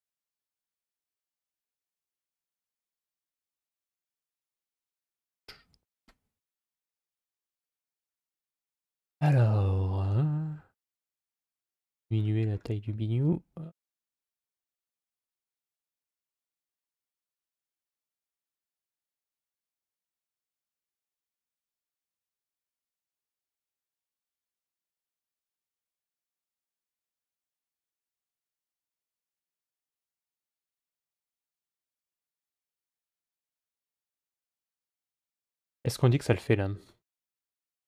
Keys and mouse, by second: 0.0-1.0 middle drag, 2.0 middle click, 3.6 click, 6.4 click, 8.0 click, 8.6 click, 9.0 click, 9.8 g, 21.0 middle click, 22.4 g, 24.9 middle click, 28.2-30.9 middle drag, 31.2 Tab, 32.2 KP_Divide, 33.2-36.7 middle drag.